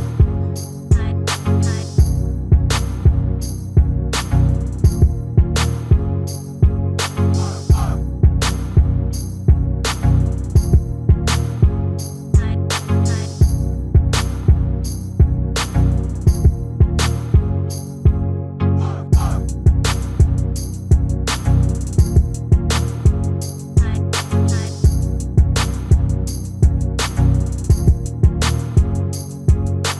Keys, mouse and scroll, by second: 0.5-2.3 drag, 2.0 s, 4.9-8.7 middle drag, 9.5-11.1 middle drag, 11.1-12.9 drag, 13.8-19.0 middle drag, 19.0-20.8 drag, 20.3 shift+a, 21.9-23.7 middle drag, 22.9 s, 27.9-29.6 drag.